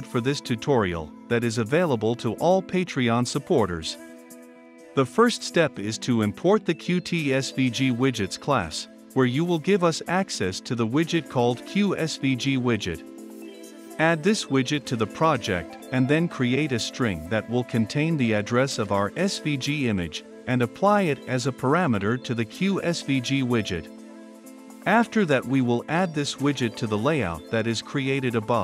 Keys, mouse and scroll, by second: 0.7-7.9 drag, 7.9 Return, 7.9-15.6 typing, 10.8 Return, 12.1 click, 16.1 click, 16.7 Return, 16.8-21.9 typing, 22.0-23.2 drag, 23.0-23.9 typing, 23.7-25.5 drag, 25.8 ctrl+F5, 27.6-28.6 drag.